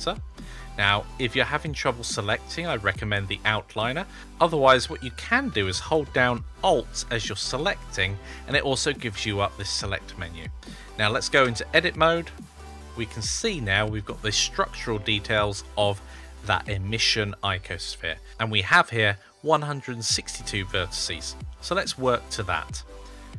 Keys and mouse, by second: 0.9 click, 1.8 click, 2.5 click, 3.4 click, 7.3 alt+click, 11.3 Tab.